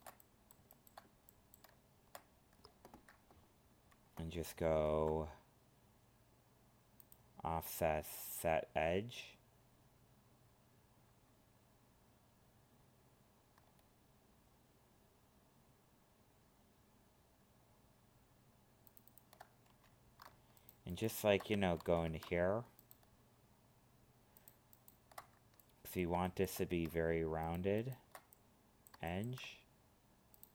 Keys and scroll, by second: 21.8 ctrl+z.